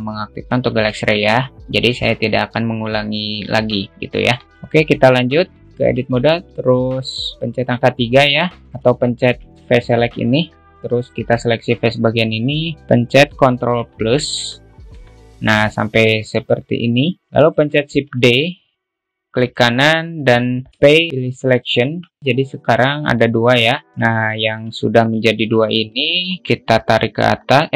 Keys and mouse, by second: 4.4 middle click, 5.2 middle click, 5.6 alt+middle click, 6.3 Tab, 6.5 alt+middle click, 8.5 alt+z, 8.6 alt+middle click, 9.4 alt+shift+middle click, 11.6 click, 12.7 middle click, 16.6 alt+middle click, 18.5 shift+d, 21.1 p, 23.2 Tab, 24.3 Tab, 24.8 alt+shift+middle click, 25.3 alt+z, 25.3 a, 25.8 1, 26.4 click.